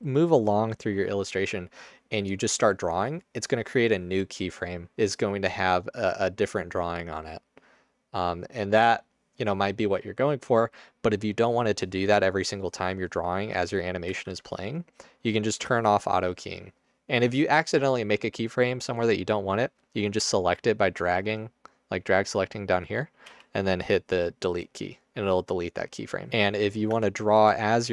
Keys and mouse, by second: 14.2 ctrl+z, 23.3 Delete, 25.1-26.2 drag, 26.9 Tab, 27.6 space.